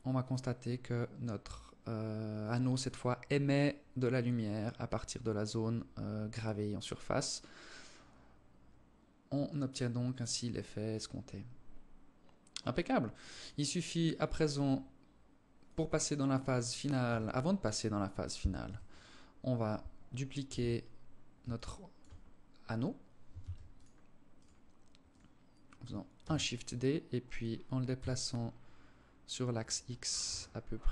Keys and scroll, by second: 16.2 KP_0, 17.8 KP_7, 19.6 t, 22.6 ctrl+s, 25.4 shift+d, 29.4 KP_1.